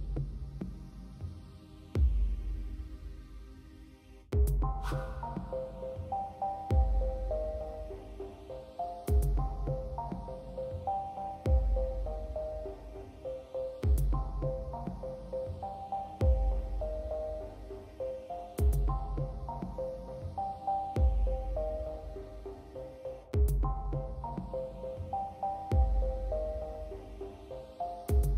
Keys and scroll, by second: 0.0-2.4 typing.